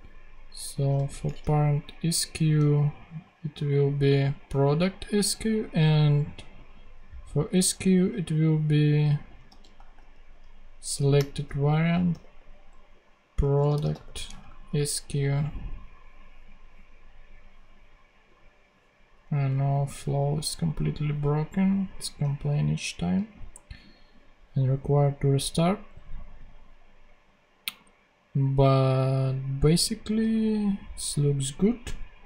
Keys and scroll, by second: 1.1 ctrl+super+c, 2.0 ctrl+Tab, 9.0-14.3 typing, 10.8 Return, 14.3 super+Right.